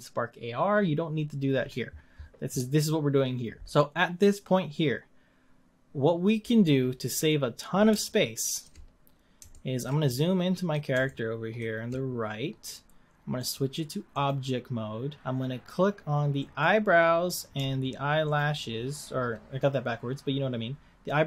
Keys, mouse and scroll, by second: 6.4-8.1 scroll up 10, 8.1 shift+middle click, 8.7 scroll up 4, 9.7-12.1 shift+middle drag, 12.1 scroll up 1, 14.3-16.6 drag, 18.4 shift+click.